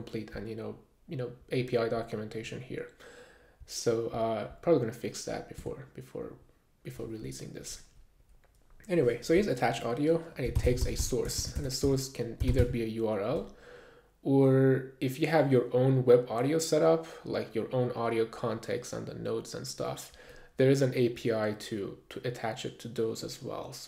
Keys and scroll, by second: 5.6 Return, 10.3-13.1 typing.